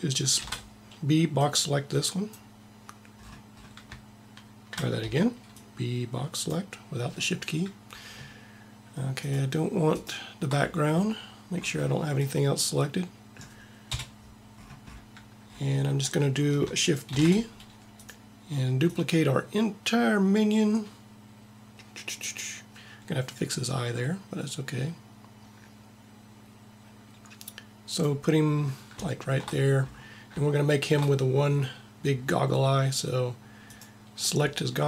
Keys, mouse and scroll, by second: 0.4 shift+b, 5.1 b, 6.6 b, 9.3-11.3 drag, 13.9 KP_1, 17.3 shift+d, 19.1 click, 33.8 click.